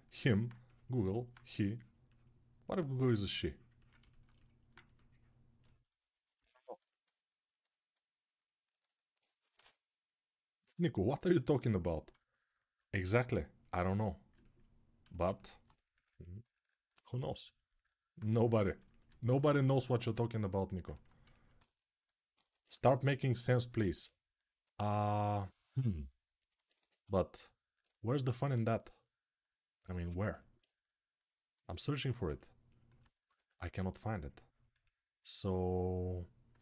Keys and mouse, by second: 6.7-21.8 alt+right drag, 9.4 g, 16.9 1, 21.8-30.1 drag, 22.5 2, 26.5 1, 31.5-33.1 right drag, 33.1-36.6 drag, 33.1 2.